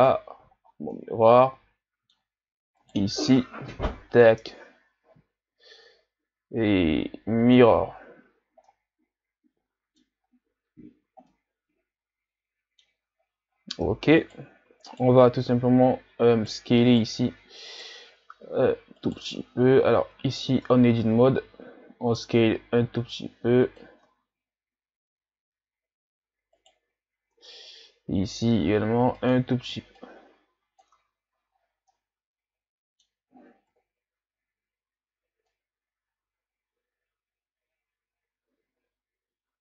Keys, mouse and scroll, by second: 0.8 scroll down 2, 0.9-2.8 middle drag, 2.8 right click, 4.1-7.1 drag, 8.2 a, 8.3-8.7 scroll down 5, 8.7-10.2 middle drag, 10.2-11.2 scroll up 8, 11.2 scroll up 1, 11.3-13.2 middle drag, 13.2 shift+scroll down 4, 13.5-13.9 scroll up 2, 14.2 right click, 14.9 shift+right click, 15.4 s, 16.9 right click, 17.7 right click, 18.3 s, 19.3 Tab, 19.8 a, 20.0 a, 20.9 a, 21.4 s, 24.1 Tab, 26.6 right click, 27.3 Tab, 28.5 s, 30.0 click, 30.9 Tab, 31.3 a, 31.6 scroll down 1, 31.9-33.7 middle drag, 33.7 KP_1, 35.5-38.5 middle drag.